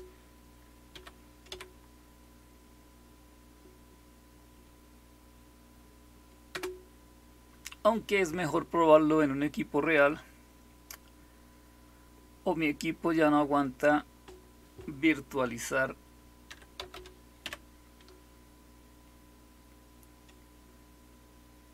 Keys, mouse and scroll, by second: 0.8-1.4 typing, 6.4 Return, 16.2-17.3 typing.